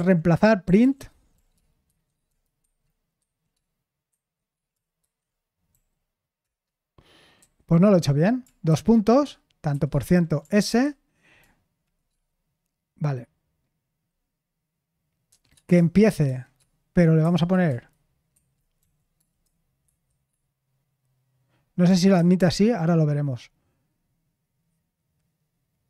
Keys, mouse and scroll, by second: 0.0-5.7 typing, 6.4 Return, 7.4 u, 9.4-10.7 typing, 17.2 typing, 18.3-18.8 typing, 19.8 typing, 22.1 /.